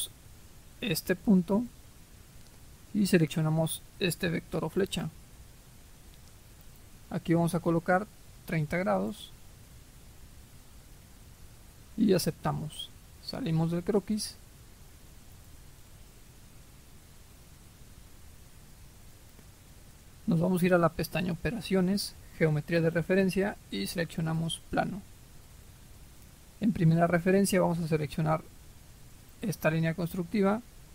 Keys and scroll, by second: 8.4 typing, 9.0 Return.